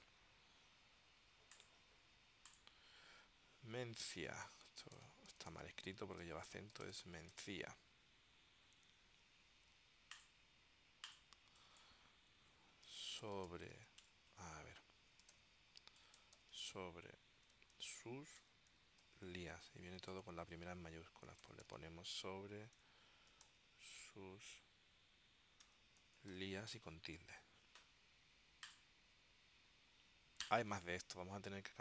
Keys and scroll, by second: 4.8-8.1 typing, 6.3 Tab, 12.7-20.0 typing, 20.3 Tab, 21.2-24.2 typing, 25.8 space, 26.6 s.